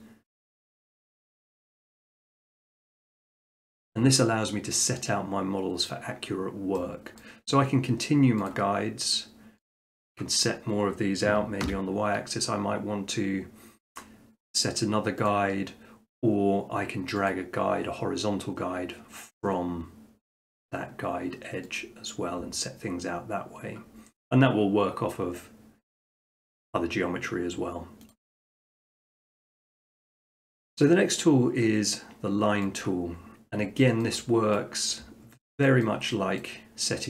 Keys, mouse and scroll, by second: 3.1 Escape, 7.2-8.3 middle drag, 8.5-9.6 drag, 9.7-10.9 drag, 11.6 y, 15.3-16.4 drag, 17.3-18.4 drag, 21.8-22.9 drag, 26.3-27.4 drag, 28.1-29.2 right drag, 29.4-30.5 middle drag, 32.8-33.2 drag, 33.2 middle click, 34.0 shift+middle click, 34.5 middle click, 35.2 middle click, 35.8 shift+middle click, 36.4 middle click.